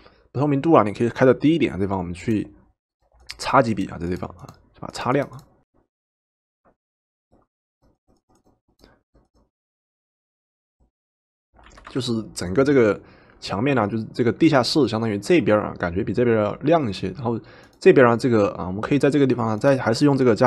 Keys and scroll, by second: 11.8 v.